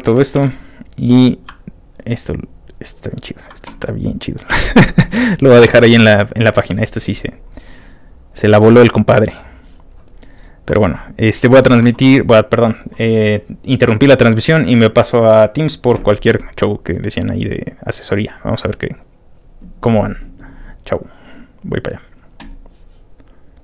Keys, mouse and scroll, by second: 1.2-1.9 scroll down 4, 2.7 scroll down 1, 3.0 ctrl+middle click, 3.2-4.2 ctrl+scroll up 1, 4.2 ctrl+click, 5.7 ctrl+w, 6.9 click, 7.3 click, 8.3 click, 9.9-10.3 scroll down 2, 10.3 scroll up 1, 11.3 click, 22.4 click, 23.5 click.